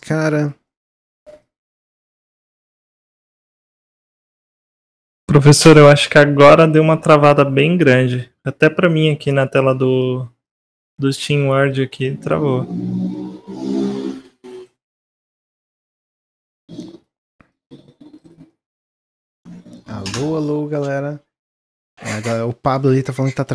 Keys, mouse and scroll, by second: 0.5-1.3 middle drag, 1.3-3.3 drag, 3.3-3.7 scroll up 2, 3.7 shift+middle click, 4.5-6.1 drag, 8.0-9.2 drag, 10.3 click, 11.8-13.1 middle drag, 13.1-14.1 drag, 14.2 s, 15.4 click, 16.7-17.4 middle drag, 17.4 click, 18.4-21.5 middle drag.